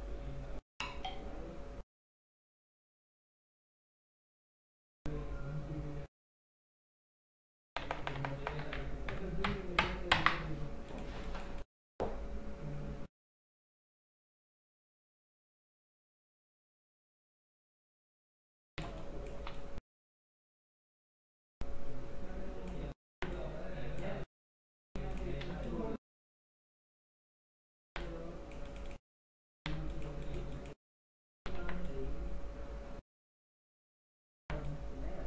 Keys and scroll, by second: 7.8 ctrl+KP_Subtract, 9.2 ctrl+KP_Add, 10.5 space, 18.9 space, 23.2 x, 25.6 space, 26.9 x, 29.8 space, 31.7 x, 34.5 x.